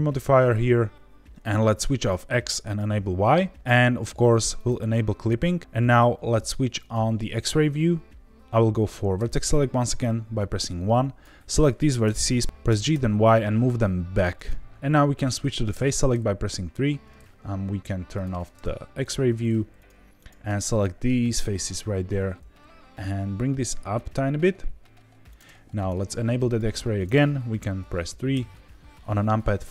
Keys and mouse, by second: 1.9 click, 2.6 click, 4.5 click, 6.9 click, 9.1 1, 10.7 click, 12.0 g, 12.4 Escape, 12.6 g, 12.9 y, 14.3 click, 15.7 3, 19.0 click, 19.3 shift+click, 19.7 shift+click, 20.2 shift+click, 20.5 middle click, 21.2 g, 21.3 z, 25.2 click, 26.4 click, 28.3 KP_3.